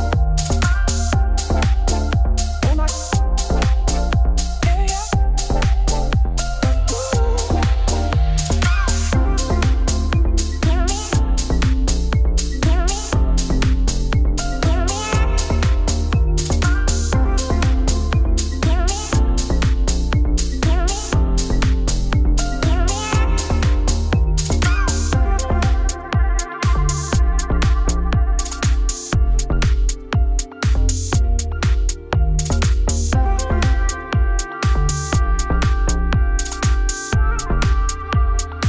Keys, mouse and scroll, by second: 0.0 click, 0.2 Tab, 0.3 a, 1.8 Tab, 1.9 y, 2.1 Tab, 3.0 z, 3.7 click, 4.0 ctrl+x, 4.4 Tab, 4.5 click, 4.8 click, 5.0 click, 5.3 Tab, 5.7 3, 5.7 click, 5.9 shift+click, 6.1 x, 6.6 middle click, 6.9 e, 9.1 Tab, 9.2 middle click, 9.3 z, 9.6 click, 10.0-11.3 middle drag, 11.3 scroll down 1, 11.5-13.1 shift+middle drag, 13.5 shift+right click, 13.7 shift+a, 14.1 Tab, 14.3 s, 16.6 Tab, 16.7 g, 18.3 middle click, 18.7 a, 19.0 click, 19.1 click, 19.4 Tab, 19.6 s, 20.3 s, 20.7 Tab, 20.8 g, 22.2 Tab, 22.3 middle click, 22.5 g, 25.5 middle click, 26.0 Tab, 26.4-28.4 typing, 28.3 Tab, 30.8 shift+middle click, 30.9 scroll up 2, 31.2 g, 32.4-32.7 scroll down 1, 32.7 KP_1, 33.4 r, 36.6 click, 36.8-38.0 drag, 38.1 click, 38.3 middle click, 38.4 scroll down 1.